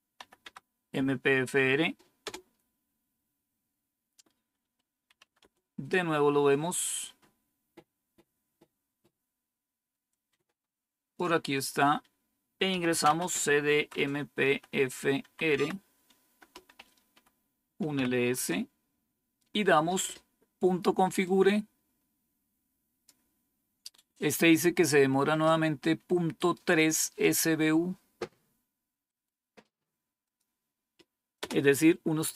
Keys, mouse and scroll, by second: 0.1 typing, 2.1 Tab, 4.8-5.7 typing, 6.9 scroll up 1, 10.0-11.1 drag, 11.5 click, 12.4-18.2 typing, 21.2-23.0 drag, 26.3 right click, 27.1 click, 28.9 right click, 30.2 click, 31.3 Return.